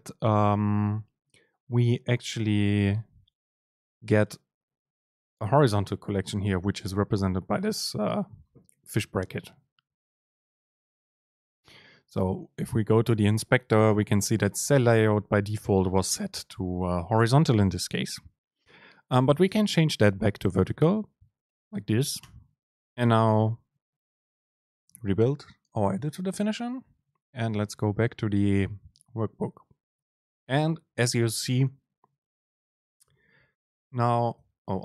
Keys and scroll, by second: 19.6 super+space, 24.6 ctrl+shift+super+F9, 30.1 Up, 30.4 Down, 30.6 Up, 31.1 Down, 33.4 Return, 34.4 BackSpace.